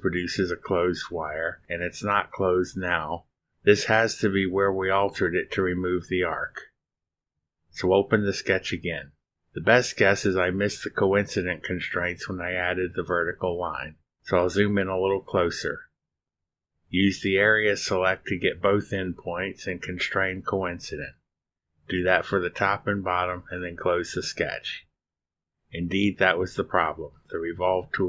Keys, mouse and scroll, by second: 2.7 ctrl+r, 8.2 click, 9.8-10.5 scroll up 4, 11.2-12.1 drag, 12.2-12.9 scroll up 3, 13.5-14.2 drag, 15.2-17.2 drag, 19.2 click, 20.7-21.6 drag, 23.7 click, 25.5 click.